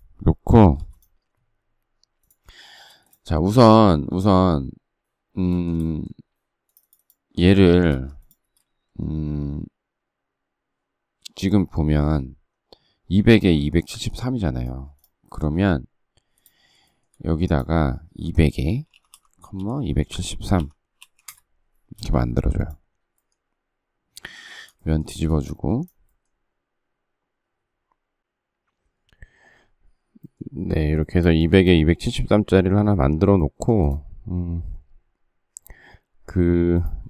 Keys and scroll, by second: 0.5 m, 2.6 space, 7.6 Escape, 18.2-21.7 typing, 24.2 r, 24.8 space.